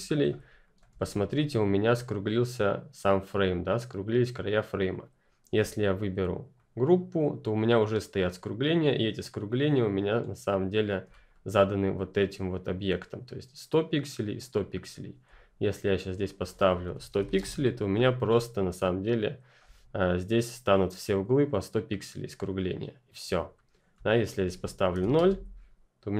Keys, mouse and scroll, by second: 0.6 click, 1.0-4.4 ctrl+scroll up 1, 4.4 scroll up 1, 4.6-5.1 ctrl+scroll down 1, 5.5 ctrl+click, 11.0-14.8 ctrl+scroll up 1, 14.8 scroll down 2, 15.3-15.8 scroll up 1, 15.8 click, 16.6-17.7 typing, 19.6 ctrl+Return, 19.7-21.0 ctrl+scroll up 1, 23.4-24.0 scroll down 1, 24.0 scroll up 1, 24.2 click, 24.9 typing, 25.1 Return, 25.8 ctrl+click.